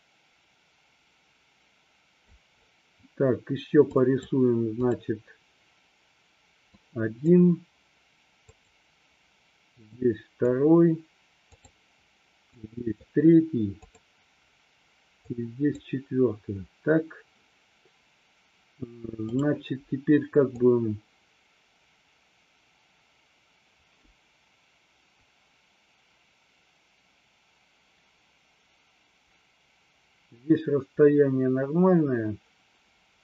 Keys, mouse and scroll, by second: 4.1 click, 5.1 click, 6.8 click, 8.6 click, 9.9 click, 11.6 click, 12.6 click, 13.9 click, 15.3 click, 20.7-33.2 drag.